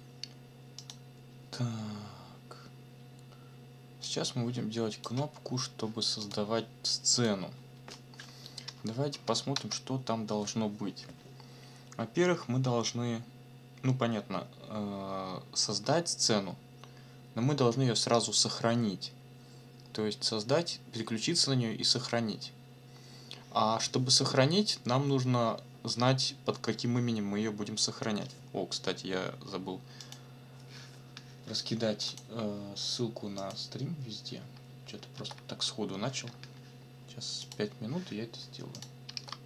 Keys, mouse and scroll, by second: 0.8 click, 1.7 scroll down 2, 4.0-5.2 drag, 6.2 click, 7.2 click, 8.6 Return, 9.5 Tab, 30.0 click, 32.1 click, 33.4 click, 35.1 ctrl+c, 37.4 click, 38.7 click, 39.1 ctrl+v.